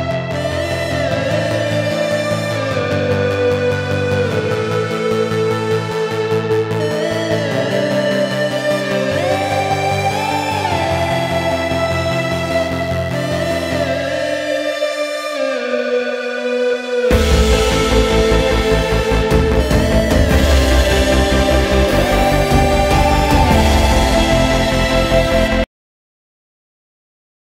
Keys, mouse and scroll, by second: 0.0-2.8 drag, 7.3 click, 9.4 click, 12.0 click, 16.0 click, 17.1-20.2 drag, 23.5 click.